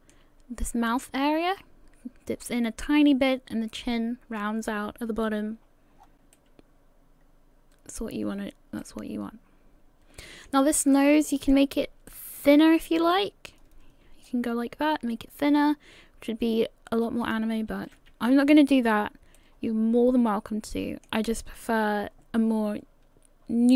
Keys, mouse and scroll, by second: 6.0-6.4 scroll down 6, 6.3 middle click, 8.3-8.9 scroll up 6, 8.8 middle click, 10.9 middle click, 12.1 middle click, 12.8 right click, 14.2 click, 17.7 ctrl+z, 18.3-19.4 scroll down 3, 19.4 middle click.